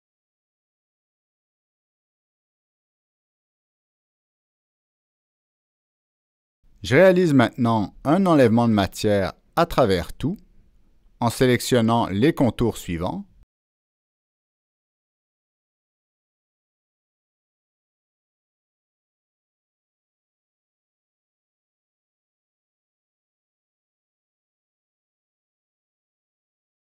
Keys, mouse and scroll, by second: 1.4 Escape, 1.4 click, 2.1 click, 4.6 Escape, 4.6 click, 8.3 click, 11.6 click, 12.3-12.6 scroll down 1, 13.7 scroll down 1, 14.8 click, 16.5 click, 17.0 middle click, 17.2 scroll down 1, 17.8 click, 18.4-19.1 scroll up 2, 19.2-19.9 scroll down 2, 20.6 click, 21.0 middle click, 21.0-21.7 scroll up 2, 21.4 middle click, 22.0-22.7 scroll down 2, 23.0 click, 23.6-24.3 scroll down 2, 24.5 click, 24.9-25.6 scroll up 2, 25.7-26.0 scroll down 1, 26.3 scroll down 1.